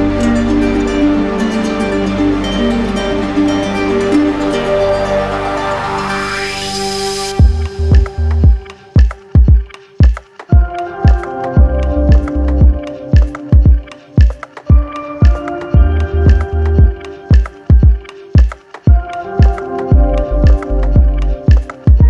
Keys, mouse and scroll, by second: 5.1 alt+right click, 5.9 alt+click, 6.4 z, 8.0 click, 9.0 right click, 11.9-13.0 drag, 14.2-17.2 drag, 17.6 ctrl+z.